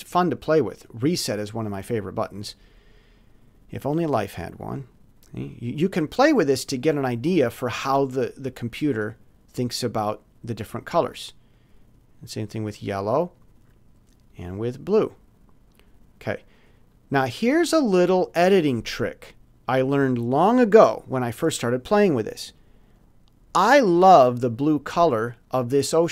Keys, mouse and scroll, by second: 0.8 click, 3.3-4.5 drag, 5.4-6.6 drag, 8.3-9.9 drag, 11.5 click, 12.1 click, 14.3-15.6 drag, 16.9 click, 24.9 click.